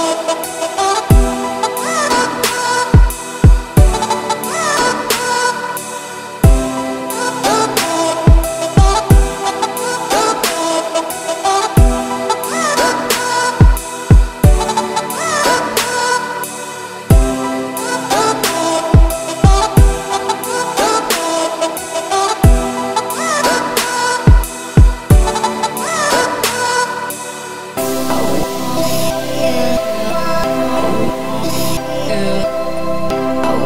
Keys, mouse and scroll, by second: 0.0 Tab, 0.4 shift+middle click, 0.7 click, 0.9 3, 1.0 click, 2.3 shift+s, 2.7 Tab, 3.1 shift+a, 5.1-5.4 scroll down 2, 5.4 scroll up 1, 6.7 scroll down 2, 7.1-7.6 middle drag, 8.2-8.8 scroll up 3, 8.9 r, 11.0 shift+middle click, 11.2 scroll up 1, 11.3 Tab, 11.7 s, 13.1-13.9 scroll up 2, 13.9 s, 18.5 s, 20.9 scroll down 4, 21.2 middle click, 21.7-22.0 scroll up 2, 22.0 `, 22.5-22.9 scroll down 11, 22.9 middle click, 23.2 e, 24.8 m, 25.8 a, 26.0 middle click, 26.8 scroll up 1, 26.9 1, 27.2 click, 27.5 x, 28.2 g, 29.9 click, 30.2 middle click, 30.9 a, 31.2 `, 31.6 z, 32.1 `, 33.3 `.